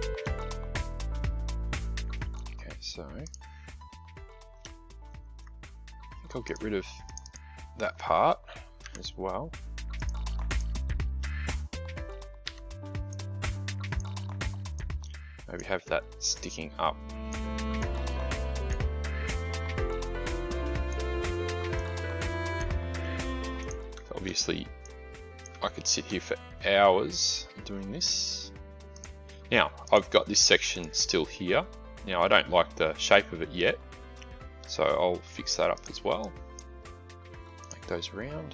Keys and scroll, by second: 8.7 Delete, 12.3 a.